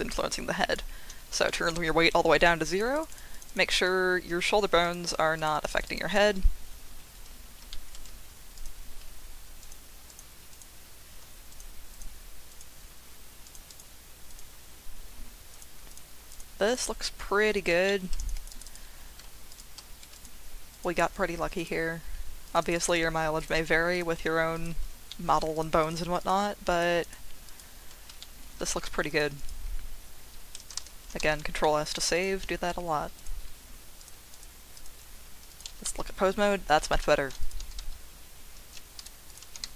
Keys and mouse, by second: 0.2 click, 1.4 shift+click, 2.9 click, 4.9 ctrl+click, 5.3 click, 5.5 click, 5.7 click, 5.8 click, 6.1-7.6 drag, 7.7 shift+middle click, 9.6 ctrl+click, 10.1 ctrl+click, 10.5 ctrl+click, 11.5 ctrl+click, 11.9 ctrl+click, 12.5 ctrl+click, 13.5 ctrl+click, 13.7 ctrl+click, 14.3 ctrl+click, 15.5 ctrl+click, 15.9 ctrl+click, 16.7 ctrl+click, 17.9 shift+middle click, 18.2 click, 18.3 click, 18.6 click, 20.1 ctrl+click, 20.7 ctrl+click, 21.6 ctrl+click, 22.4 click, 22.6 click, 22.7 click, 23.4 ctrl+click, 23.9 ctrl+click, 24.6 ctrl+click, 25.1 shift+middle click, 25.8 ctrl+click, 26.2 ctrl+click, 27.5 ctrl+click, 28.2 shift+click, 29.2 click, 31.2 ctrl+s, 31.6 click, 32.4 z, 34.0 click, 34.3-34.8 drag, 35.5 click, 35.7 r, 35.8 z, 36.9 Escape, 37.5 click, 37.6 r, 37.8 x, 38.6 Escape, 38.9 click, 39.3 click, 39.5 r, 39.6 z.